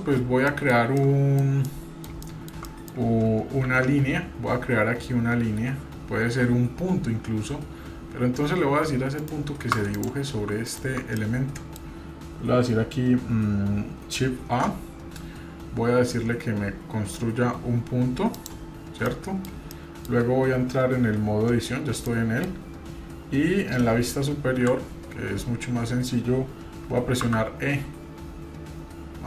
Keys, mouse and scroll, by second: 0.1 scroll up 1, 0.5-1.4 shift+middle drag, 1.7-2.0 middle drag, 2.6 middle click, 3.7 shift+a, 10.7-11.0 shift+right drag, 11.2-11.8 middle drag, 19.1-19.5 middle drag, 19.7-20.2 shift+middle drag, 22.0 middle click, 24.5 KP_7, 27.2 e.